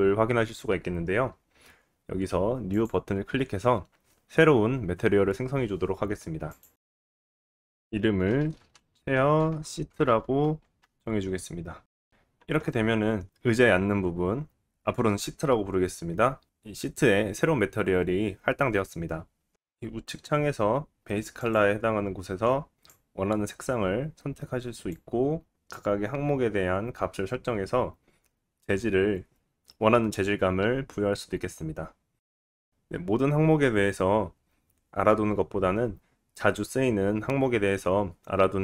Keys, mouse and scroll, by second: 2.7-21.5 drag, 21.5-23.6 middle drag, 23.6-24.7 drag, 24.7-38.6 middle drag.